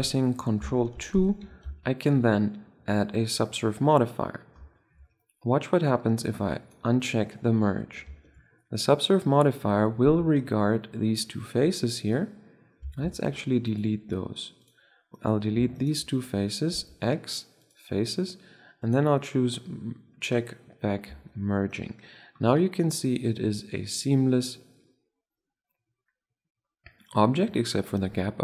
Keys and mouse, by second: 0.9 ctrl+2, 7.6-8.1 middle drag, 10.1 Tab, 12.5 middle click, 12.9 ctrl+Tab, 15.0-16.3 drag, 16.3-17.4 right drag, 16.6 x, 18.7 click, 19.5 click, 21.0 Tab.